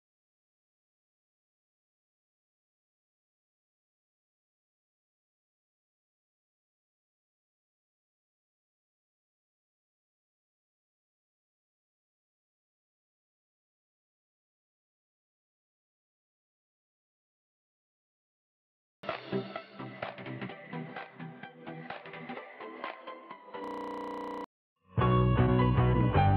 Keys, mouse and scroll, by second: 1.4 scroll up 1, 1.9 scroll down 1, 2.6 scroll down 1, 2.7 scroll up 1, 6.9-8.0 right drag, 8.6-12.7 drag, 12.7 scroll down 1, 15.1-16.2 ctrl+drag, 18.6 right click, 19.9 click.